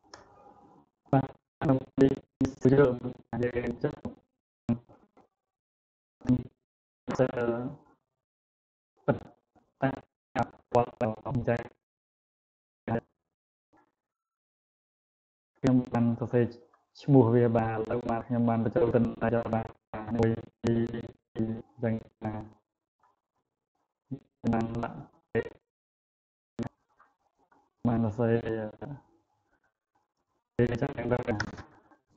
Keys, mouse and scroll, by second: 0.0-3.8 drag.